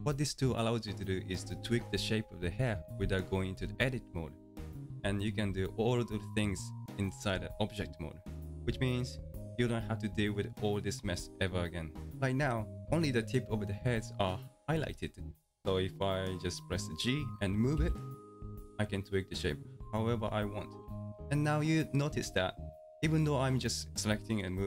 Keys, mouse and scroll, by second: 9.4 Tab, 17.8 g.